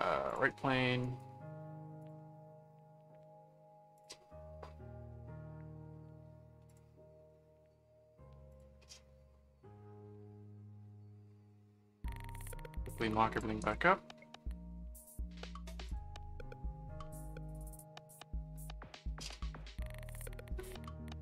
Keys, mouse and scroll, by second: 0.3 click, 1.0 right click, 2.0 click, 3.9 click, 6.7 click, 8.5 click, 12.1 click, 13.3 click, 15.8 click, 17.5 click.